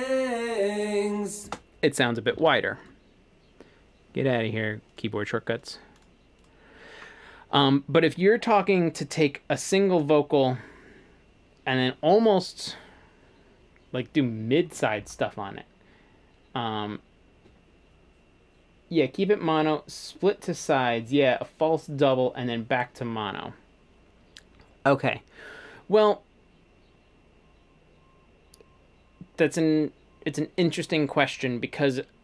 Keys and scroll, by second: 1.5 space, 2.5 shift+super+s.